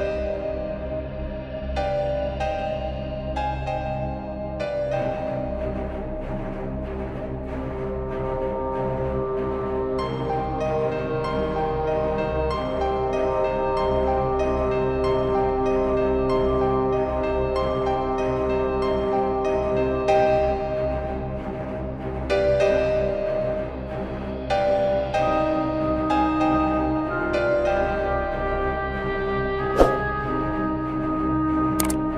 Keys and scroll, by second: 9.4 Left, 11.4 Down, 12.7 Right, 14.4 Up, 15.0 Down, 17.0 Right, 17.5 Left, 18.4 space, 19.8 Up, 22.3 Left, 22.7 Up, 23.7 Left, 24.4 space, 28.6 space.